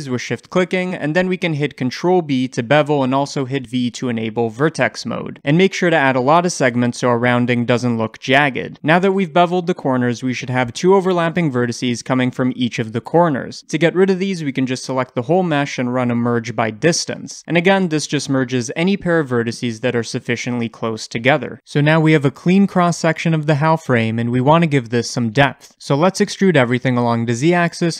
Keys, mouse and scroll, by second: 0.3 shift+click, 1.1-13.0 shift+middle drag, 1.9 ctrl+b, 13.0 click, 13.4-25.2 shift+middle drag, 15.2 a, 16.6 F3, 17.8-18.2 scroll down 1, 25.2-27.9 drag, 26.1 e.